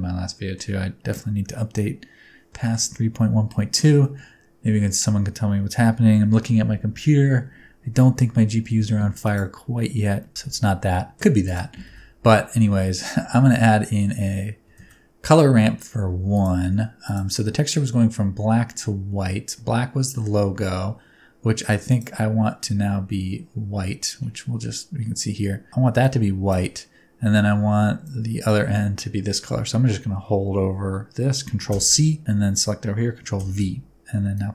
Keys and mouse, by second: 2.6 shift+middle click, 2.9 middle click, 3.8 shift+middle click, 4.0 middle click, 9.2 click, 9.8 middle click, 11.0 middle click, 11.4 click, 11.8 shift+a, 14.7 shift+a, 21.9 click, 28.0 click, 31.7 ctrl+c, 33.3 ctrl+v, 34.4-34.5 drag.